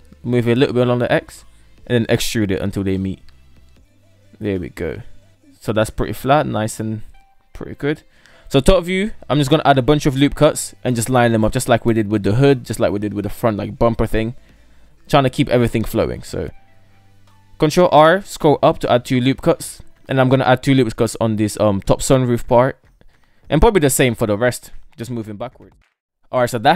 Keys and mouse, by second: 0.8 e, 3.0 middle click, 3.5 Tab, 3.7 KP_3, 4.5 Tab, 5.5-5.9 middle drag, 6.6 KP_7, 8.3 shift+middle click, 16.7 ctrl+r, 19.6 shift+middle click, 20.7 ctrl+r, 23.6 shift+middle drag, 24.8 ctrl+r.